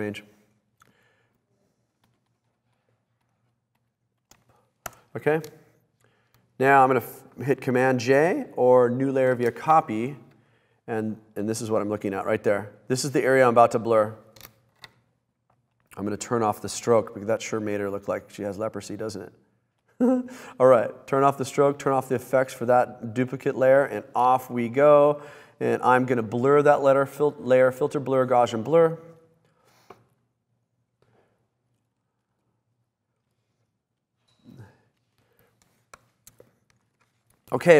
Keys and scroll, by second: 5.0 Return, 9.7 super+j, 36.9 super+=.